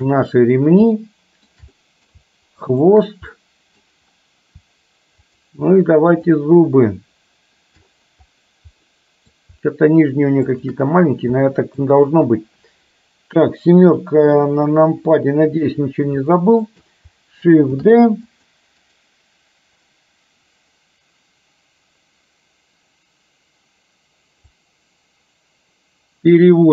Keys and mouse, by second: 1.0-1.6 shift+middle drag, 1.8 middle drag, 2.7 shift+click, 3.3-4.0 middle drag, 5.3 shift+click, 6.3 shift+click, 9.0 middle click, 10.5 shift+click, 11.5-12.0 middle drag, 14.8 KP_7, 16.3 shift+middle click, 17.8 shift+d, 18.8-20.7 right drag, 24.6-26.7 drag.